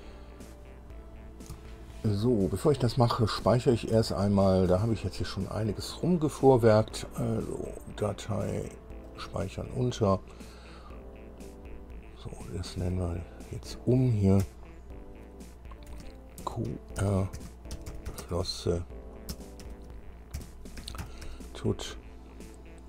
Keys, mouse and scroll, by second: 1.3-1.6 scroll down 2, 1.8-3.0 shift+drag, 3.1-4.1 shift+middle drag, 4.3 shift+middle click, 5.4 middle click, 8.2 click, 9.3 click, 13.3 click, 14.6 Delete, 15.2 Delete, 15.3 Delete, 15.3 Delete, 16.8-18.4 typing, 19.5-21.5 typing.